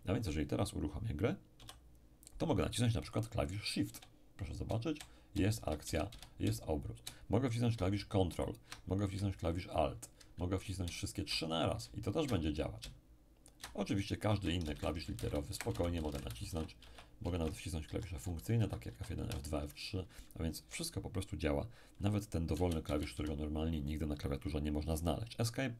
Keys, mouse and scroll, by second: 1.6 p, 14.2-17.3 typing, 14.3 ctrl+alt+shift+w, 14.3 ctrl+alt+shift+e, 14.3 ctrl+alt+shift+r, 17.8 F2, 18.2 F3, 18.9 F4, 18.9 F5, 18.9 F6, 19.2 F6, 20.5 q, 20.6 w, 20.7 e, 22.9 Return, 23.2 \.